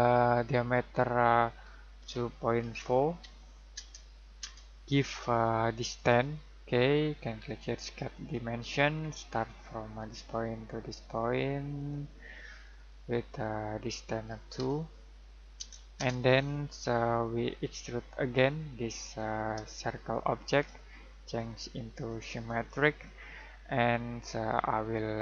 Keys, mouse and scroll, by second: 2.0-3.6 typing, 3.7 Return, 5.9 click, 8.8-9.9 scroll down 1, 9.9 click, 14.5 typing, 15.5 Return, 17.6 click, 19.8 middle click, 21.3 click.